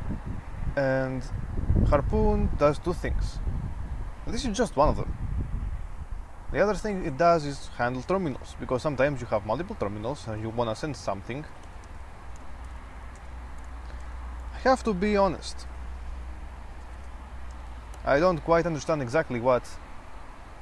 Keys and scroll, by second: 9.3 typing, 11.3-15.7 typing, 16.9-18.7 typing.